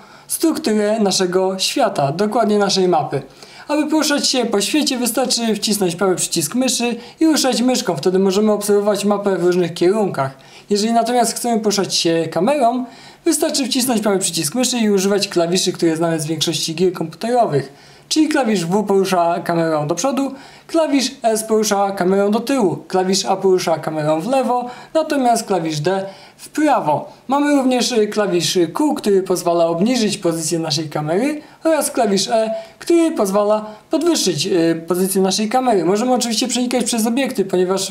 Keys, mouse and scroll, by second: 4.7-11.6 right drag, 14.4-34.7 right drag, 16.3 w, 18.1 s, 19.8 w, 22.2 s, 25.1 a, 27.0 d, 28.9 a, 30.2 d, 32.9 q, 34.2 q, 35.9 e, 36.4 right click, 36.9-37.9 right drag.